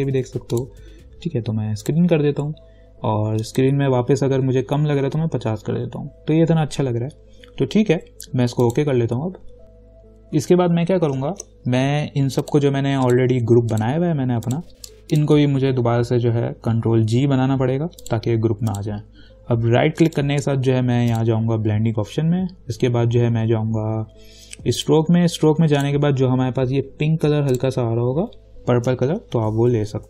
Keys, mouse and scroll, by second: 4.9-5.8 typing, 8.8 click, 10.6 v, 11.5 ctrl+-, 12.7 click, 15.3 shift+click, 17.3 ctrl+g, 18.2 click, 20.3 right click, 21.3 click, 25.0 click, 29.3 ctrl+=.